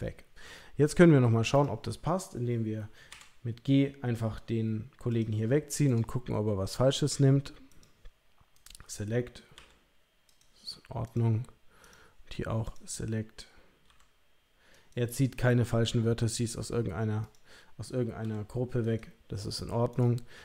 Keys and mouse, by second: 1.5 click, 3.2 g, 5.9 click, 7.0 click, 7.7 click, 9.5 g, 11.0 click, 11.8 click, 12.6 click, 13.9 g, 15.3 click, 16.3 click, 17.2 click, 18.2 g, 19.9 click.